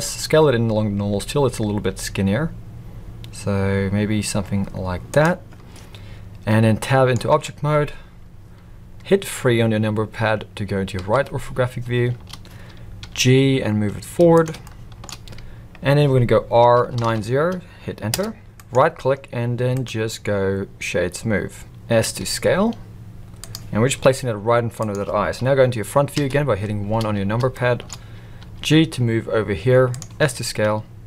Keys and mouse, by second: 6.8 middle click, 7.3 Tab, 10.9 KP_3, 13.0 g, 14.7-15.0 shift+middle drag, 16.6 r, 18.5-19.2 right drag, 19.7-21.7 right drag, 22.0 s, 24.0 g, 26.1 KP_1, 27.5-27.8 shift+middle drag, 28.4 g, 30.1 s.